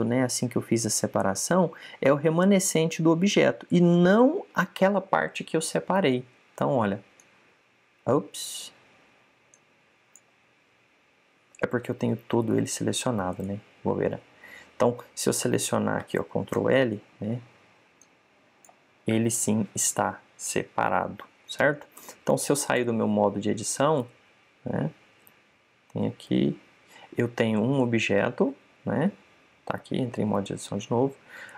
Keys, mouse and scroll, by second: 8.1 click, 10.4 click, 13.3 Tab, 14.2 right click, 17.3 ctrl+l, 19.0 click, 22.9 Tab, 23.6 Tab, 26.1 a, 27.2 Tab, 31.3 Tab.